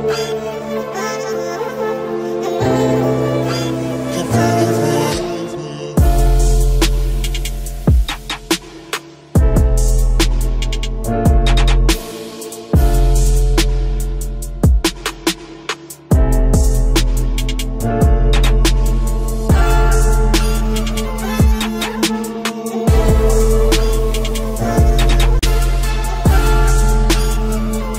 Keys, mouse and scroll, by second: 0.1 KP_3, 2.6 e, 3.8 e, 5.0 r, 6.0 s, 7.0 e, 8.4 e, 10.0 ctrl+z, 10.8 r, 12.5 KP_7, 13.3 Tab, 13.7-16.3 typing, 17.3 middle click, 18.0 Tab, 18.3 a, 18.5 a, 19.5 ctrl+n, 20.2 Tab, 21.1 click, 22.1 KP_Decimal, 22.7 KP_3, 24.1 KP_7, 24.7 ctrl+z, 24.9 ctrl+z, 25.3 ctrl+z, 26.3 KP_3.